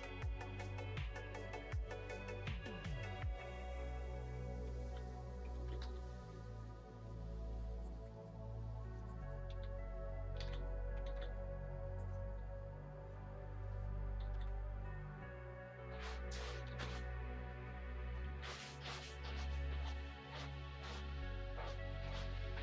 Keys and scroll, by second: 3.2 ctrl+z, 4.7 ctrl+z, 5.5 ctrl+z, 5.8 x, 9.4 x, 10.3 ctrl+z, 11.0 ctrl+z, 14.2 ctrl+z, 16.6 ctrl+z, 18.2 ctrl+z, 21.0 ctrl+z, 22.4 ctrl+z.